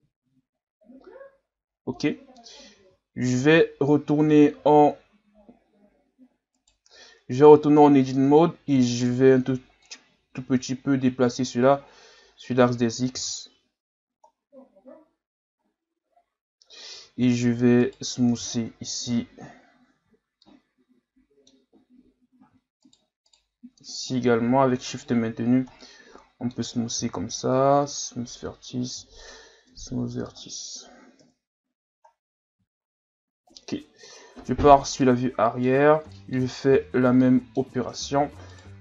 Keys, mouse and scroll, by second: 2.8 z, 3.4 Tab, 6.6 right click, 6.9 b, 9.8-12.9 drag, 13.1 z, 13.5 Tab, 14.3-14.9 scroll down 2, 14.9 scroll up 3, 15.6-16.2 scroll down 3, 16.2-17.0 scroll up 6, 17.0 Tab, 17.8 right click, 18.7 ctrl+KP_Add, 19.1 ctrl+KP_Add, 20.4-21.9 middle drag, 21.9-22.6 scroll up 1, 22.8 shift+right click, 23.3 shift+right click, 24.9 shift+right click, 25.8-27.0 middle drag, 27.0 w, 28.9 w, 29.7 Tab, 30.0 scroll down 3, 30.2-31.2 middle drag, 31.2 KP_1, 32.1 scroll down 2, 32.6 scroll up 3, 34.1 KP_3, 35.0-35.7 middle drag, 35.7 scroll up 2, 36.1-36.6 middle drag, 36.6 scroll down 3, 36.9 scroll up 1, 37.2-37.9 middle drag, 37.9 Tab, 38.5 right click.